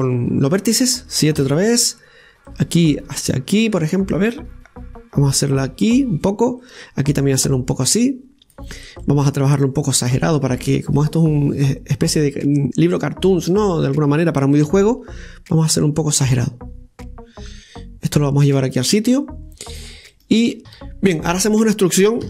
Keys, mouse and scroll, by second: 0.1 click, 2.3 KP_7, 3.4 right click, 4.2-7.2 drag, 7.5 right click, 8.3-9.9 drag, 9.9 right click, 10.4-11.8 drag, 11.8 right click, 12.6-14.3 drag, 14.3-15.5 right drag, 15.5 g, 20.7 ctrl+z, 21.5 ctrl+z, 22.0-22.2 middle drag.